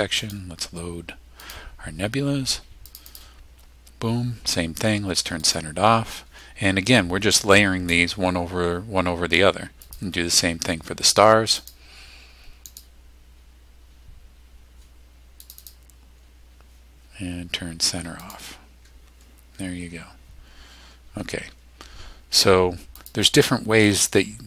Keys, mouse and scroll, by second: 0.2 click, 1.4 click, 2.9 click, 5.4 click, 9.8 click, 11.6 click, 12.7 click, 15.4 click, 18.2 click, 23.0 click.